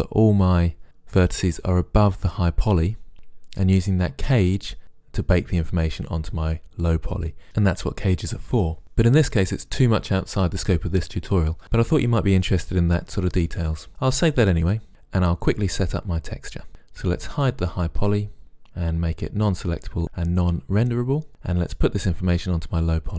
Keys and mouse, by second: 14.7 click, 17.5-17.8 drag.